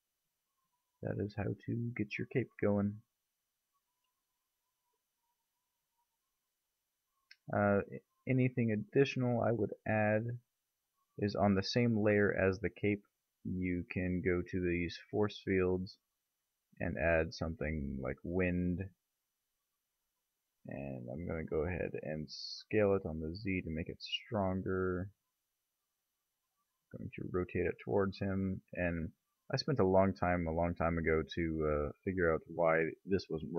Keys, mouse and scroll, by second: 3.6 click, 4.3 click, 6.1-7.0 middle drag, 6.3 a, 8.1 middle click, 11.2 click, 12.5 shift+a, 19.9 KP_3, 21.4 g, 22.6 s, 24.6 s, 26.6 click, 26.9 r, 28.4 g, 33.0 m.